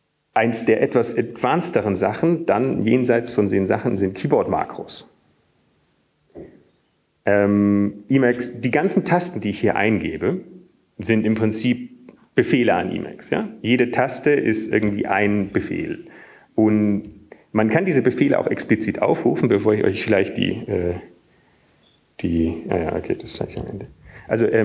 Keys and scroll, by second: 6.6 Up, 8.2-8.7 typing, 9.3 Up, 10.0 Up, 10.6 Up, 15.8 Up, 18.0 Down, 18.0 Up, 19.4 Up, 20.2 Up, 20.8 Down.